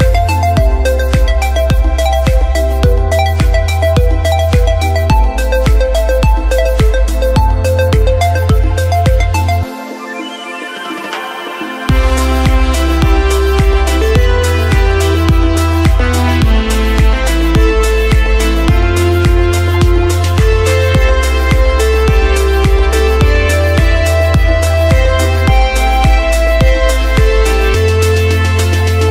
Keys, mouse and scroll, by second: 0.0 click, 0.3 shift+middle click, 0.6 click, 0.8 scroll down 3, 0.9 shift+middle click, 1.1 click, 1.5 shift+middle click, 1.6-2.0 scroll up 4, 1.8 click, 2.2 click, 2.5 click, 2.8 shift+middle click, 2.8 scroll down 1, 3.1 click, 3.4 click, 3.7 scroll down 1, 3.7 shift+middle click, 4.2 click, 4.6 click, 5.1 click, 5.2 click, 5.4 shift+middle click, 5.8 click, 5.9 click, 6.6 click, 6.7 click, 7.1 click, 7.2 scroll down 1, 7.6 click, 7.6 shift+middle click, 7.9 click, 8.2 scroll down 2, 8.3 shift+middle click, 8.4 scroll up 4, 8.7 click, 8.9 click, 9.1 click, 9.3 click, 9.6 click, 9.9 click, 10.5 shift+middle click, 10.5 scroll down 5, 10.7 scroll up 3, 11.0 click, 11.2 shift+middle click, 11.2 scroll up 2, 11.5 click, 11.7 shift+middle click, 12.2 click, 13.0 click, 13.6 shift+middle click, 14.1 click, 14.2 click, 14.7 click, 14.8 scroll down 2, 14.9 shift+middle click, 15.0 scroll up 3, 15.4 click, 15.6 click, 15.9 click, 16.2 shift+middle click, 16.7 click, 17.3 click, 18.0-18.4 scroll down 6, 18.7 shift+middle click, 18.7 scroll down 2, 19.2 middle click, 23.5 shift+middle click, 23.7-24.2 scroll up 2, 23.9 middle click, 24.3 scroll down 4, 24.5 middle click, 24.6 shift+middle click, 24.9 middle click, 26.4 KP_3, 26.5 KP_1, 26.7-27.1 scroll up 6, 27.1 scroll down 2, 27.4 scroll up 1, 27.7 shift+middle click, 28.2 middle click, 29.0 KP_1.